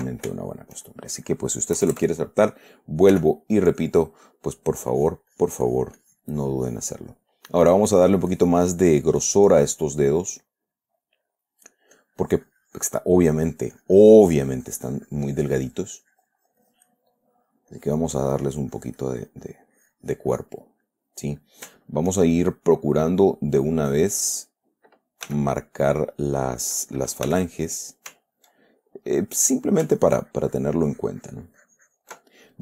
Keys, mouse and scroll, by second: 0.7 ctrl+shift+middle click, 2.1 KP_Add, 3.5 f, 4.1 click, 5.3-7.3 drag, 7.4 middle click, 8.4-10.5 drag, 10.5-12.3 middle drag, 12.3-13.6 drag, 13.6 middle click, 17.1 click, 17.5 middle click, 18.1-21.1 drag, 21.2-25.1 middle drag, 25.7 f, 26.3 click, 27.7 f, 28.0 click, 28.9-30.2 ctrl+middle drag, 30.4-32.6 ctrl+drag.